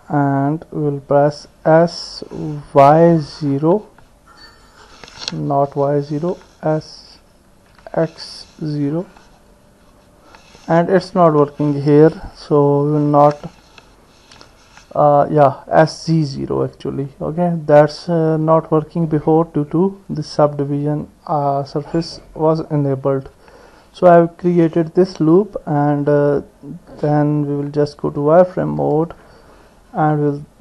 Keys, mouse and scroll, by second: 0.1 click, 1.9 s, 7.5 s, 12.7 s, 15.7 click, 16.0-18.1 middle drag, 21.9 click, 22.7 middle click, 27.6 click, 29.1 KP_1.